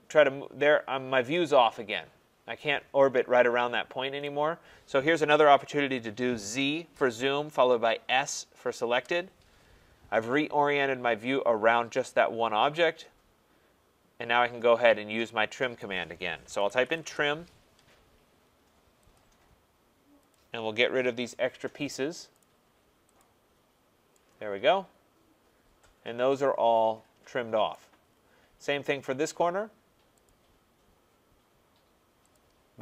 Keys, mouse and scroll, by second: 4.2 right click, 6.4 z, 6.9 Return, 8.1 s, 8.9 Return, 9.8 scroll, 11.9 typing, 12.5 Return, 15.8 right click, 16.3-17.4 typing, 19.1 click, 20.3 click, 21.3 click, 22.4 click, 23.1 click, 23.6 scroll, 25.2 middle click, 27.7 right click, 28.0-28.7 scroll, 30.3 click, 32.3 click.